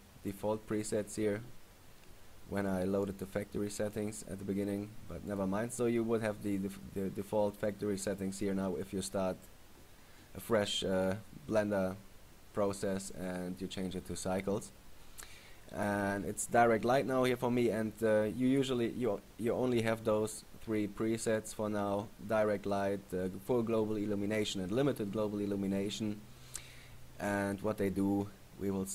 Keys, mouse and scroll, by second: 5.5 click, 17.3 click, 18.9 click, 22.9 click.